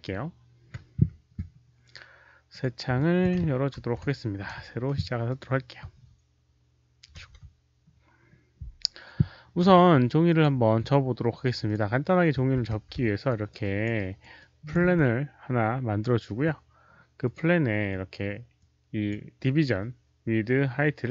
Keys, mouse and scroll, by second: 2.4 click, 2.9 alt+click, 5.2 alt+click, 7.1 ctrl+n, 10.2 ctrl+s, 10.2 alt+click, 11.6 ctrl+n, 11.6 ctrl+s, 11.6 alt+click, 12.5 f, 13.2 alt+right click, 13.5 alt+click, 13.9 alt+right click, 14.3 alt+click, 15.3-17.7 typing, 15.9 click, 16.0 alt+right click, 17.2 click, 17.2 alt+right click, 18.5 click, 18.8-19.5 typing, 19.0 alt+right click, 21.0-21.1 typing.